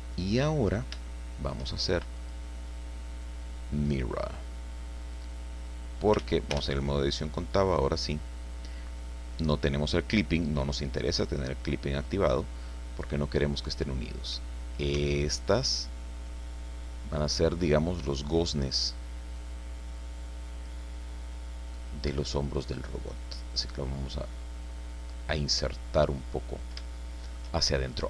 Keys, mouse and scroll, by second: 0.4-0.9 scroll up 2, 1.1-2.1 shift+middle drag, 2.1 click, 3.8 click, 5.1-6.3 drag, 6.2 ctrl+z, 6.5 ctrl+Tab, 11.2-14.5 drag, 14.9 s, 18.5 click, 19.3-20.8 drag, 21.7-25.5 drag, 25.8-26.3 scroll up 2, 26.3-26.9 scroll down 3, 26.9 shift+middle click.